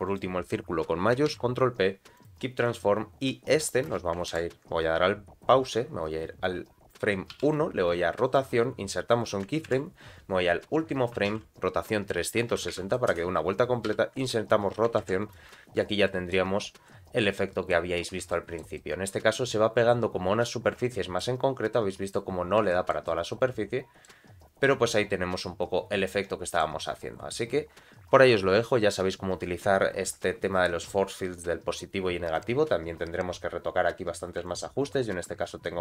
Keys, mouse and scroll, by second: 0.1 shift+click, 1.3 ctrl+p, 2.6 click, 3.9 space, 4.3 shift+Left, 7.3 i, 9.7 shift+Right, 11.1 r, 15.0 shift+Left, 15.3 space, 16.0 middle click, 16.5 scroll up 1, 16.8 middle click, 17.9 scroll up 1, 18.3 shift+middle click, 18.8 middle click, 20.9 shift+middle click, 21.4 scroll down 1, 21.8 middle click, 22.3 scroll down 2, 22.7 shift+middle click, 23.1-24.1 middle drag, 24.3 scroll up 1, 24.6 middle click, 25.1-25.4 scroll down 1, 25.4-26.7 middle drag, 32.3 click, 34.4-35.8 shift+drag.